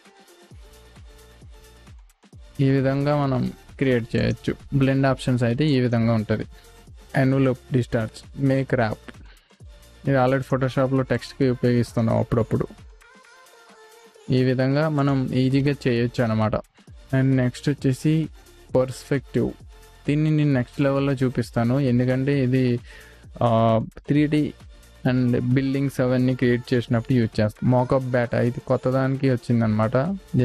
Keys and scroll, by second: 5.0 v, 6.5 Delete, 7.0 v.